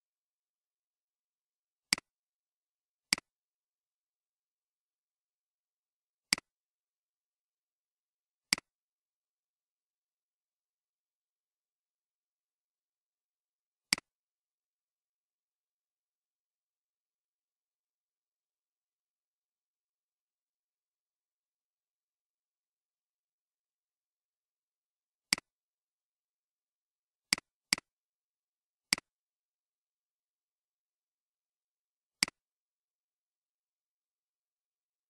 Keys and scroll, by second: 30.0 ctrl+c, 33.2 ctrl+v.